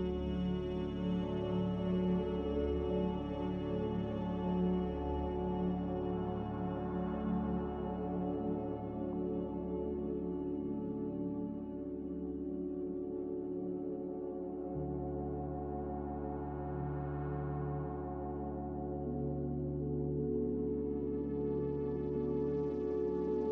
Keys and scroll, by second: 0.0 g, 5.6 z, 9.2 z, 17.8 x, 19.6 z.